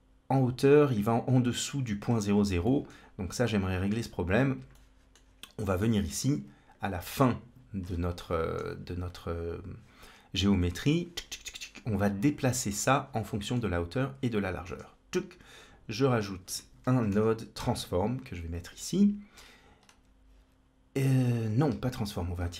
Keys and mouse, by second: 2.6 shift+middle click, 3.3 middle click, 4.6 middle click, 5.9-6.6 drag, 8.0 middle click, 12.5-13.4 middle drag, 14.5 shift+a, 21.3 click, 21.6 ctrl+x, 22.2 shift+a.